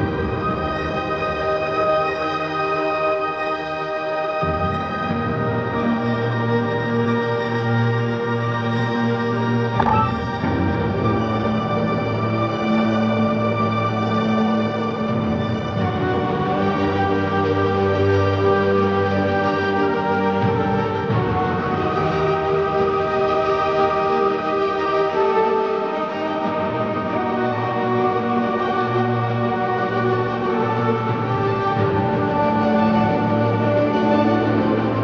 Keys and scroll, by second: 0.0-0.7 typing, 0.0 ctrl+shift+z, 1.2 ctrl+KP_Subtract, 1.7 ctrl+KP_Add, 2.3 ctrl+z, 2.9 typing, 4.7 ctrl+z, 4.9 typing, 7.3 ctrl+KP_Subtract, 7.9 ctrl+KP_Add, 9.8-12.6 typing, 10.1 Return, 13.1 ctrl+KP_Subtract, 13.5 ctrl+KP_Add, 31.0 alt+Delete, 31.9 Return, 32.1 alt+Delete, 32.5 ctrl+KP_Add, 32.7 space.